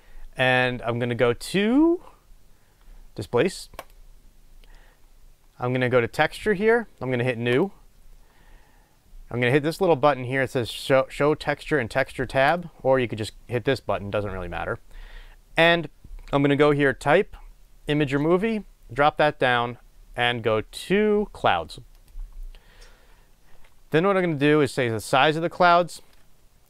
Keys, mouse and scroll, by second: 12.4 click, 18.0-26.6 drag.